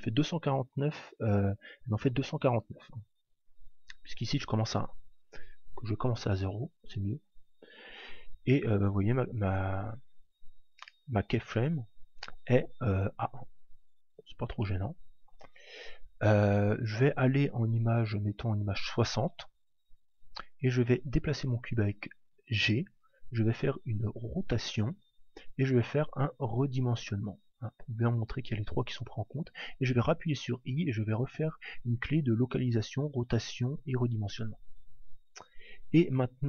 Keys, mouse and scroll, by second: 5.0 click, 8.3 click, 10.2 click, 12.3 middle click, 14.6-16.3 middle drag, 16.5 click, 19.6 middle click, 21.3 g, 23.1 click, 23.9 r, 25.4 click, 26.2 s, 27.5 click, 30.0 i.